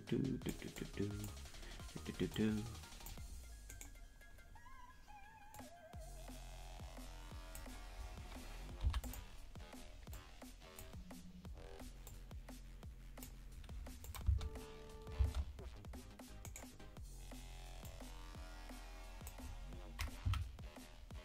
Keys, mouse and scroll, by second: 0.8 click, 2.3 click, 3.8 right click, 5.6-7.7 drag, 10.2 click, 10.2 i, 12.0-13.3 drag, 14.1-15.5 drag, 14.2 space, 15.3 space, 16.5 right click, 17.9-19.4 drag, 20.3 Right.